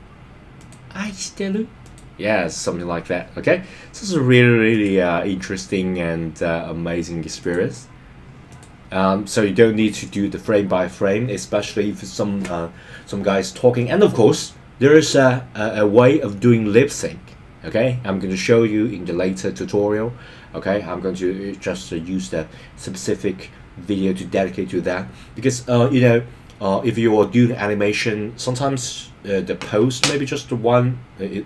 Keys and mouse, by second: 1.8 click, 4.7 click, 7.4 click, 8.4 click.